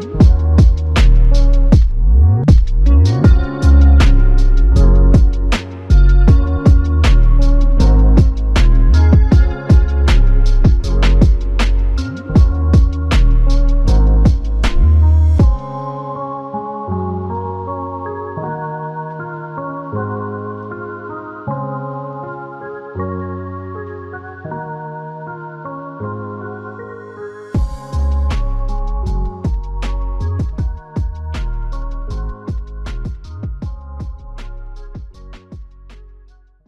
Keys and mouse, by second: 4.4 ctrl+z, 19.9 double click, 25.2 double click, 29.8 click, 30.1 alt+click.